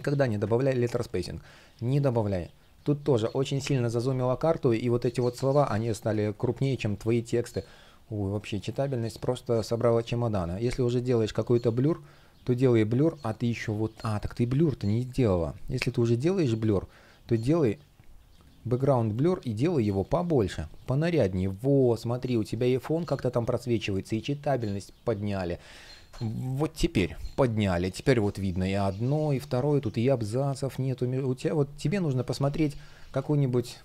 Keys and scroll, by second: 0.5 space, 4.6 shift+p, 5.7 space, 26.6 Return, 31.8 super+z, 32.7 super+z, 33.3 space.